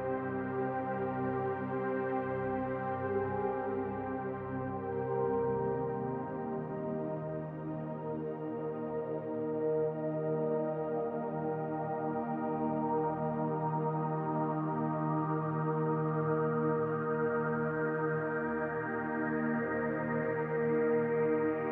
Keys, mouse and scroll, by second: 3.6 Tab, 7.2 g, 12.4 click, 13.8-17.0 drag, 18.8 shift+a.